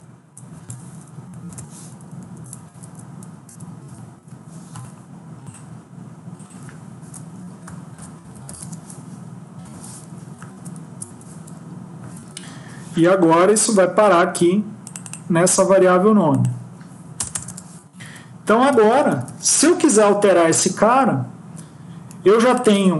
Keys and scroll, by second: 1.3 shift+Home, 2.1 shift+Up, 2.5 ctrl+;, 3.3 Tab, 3.7 Tab, 7.2 Left, 9.5 Delete, 10.4 ctrl+Right, 10.9 Right, 18.0 Up, 18.3 Tab, 18.6 Tab, 18.8 Tab, 19.0 Tab, 19.1 Tab.